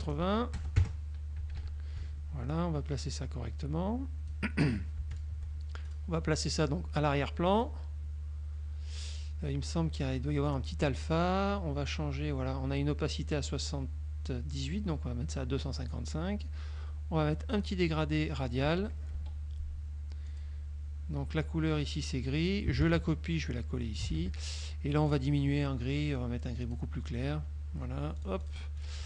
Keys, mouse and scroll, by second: 0.0-0.7 typing, 0.9 KP_Enter, 2.0 KP_Subtract, 2.6-4.6 drag, 5.2 shift+click, 5.9 shift+click, 7.6 click, 11.2 click, 14.8-16.2 drag, 17.6 click, 18.4 middle click, 19.2 F2, 20.4 click, 22.9 ctrl+c, 23.9 ctrl+click, 24.2 ctrl+v, 25.2 click, 26.8 click, 28.3-28.8 drag, 28.9 click.